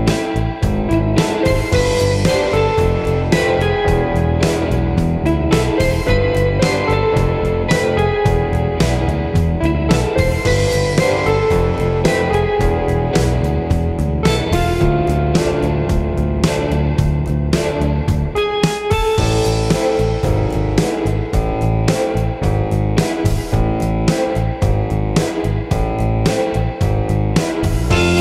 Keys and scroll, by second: 7.3 d, 13.0 i, 28.0 super+c, 28.1 super+v.